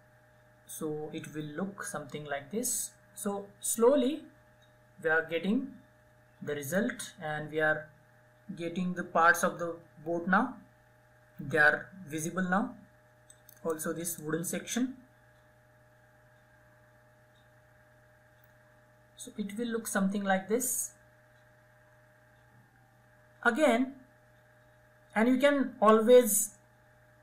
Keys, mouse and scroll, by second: 12.6 right click, 13.5-23.5 drag, 25.6-27.2 drag.